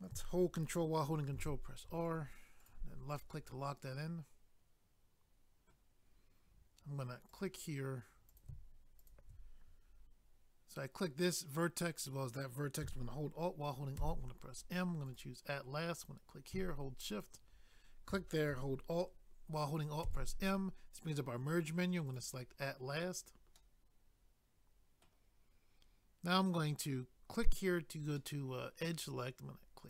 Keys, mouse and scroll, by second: 2.0 click, 2.1 click, 2.6 click, 2.7 double click, 3.2 middle click, 5.6 middle click, 5.7 middle click, 7.3 click, 7.4 click, 8.3 click, 8.4 click, 9.0 shift+click, 9.1 shift+click, 14.0 alt+m, 15.0 click, 15.1 click, 15.9 click, 16.1 click, 17.1 shift+click, 17.2 shift+click, 20.0 alt+m, 22.1 click, 22.2 click, 23.0 scroll down 1, 23.6 middle click, 27.3 click, 27.4 click, 28.2 middle click.